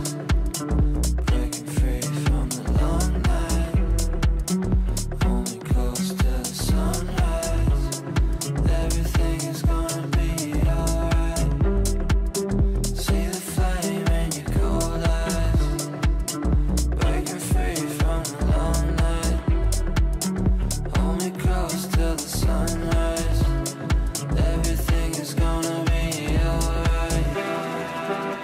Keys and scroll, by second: 21.9 shift+Page_Up, 27.1 shift+F2, 27.4 F3, 27.8 Escape.